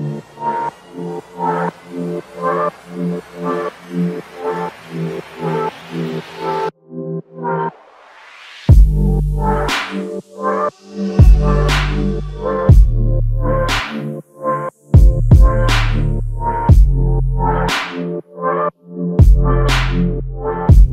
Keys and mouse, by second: 1.8 double click, 3.2 shift+click, 5.5 alt+click, 12.9 alt+shift+click, 18.5 alt+click, 20.4 ctrl+click.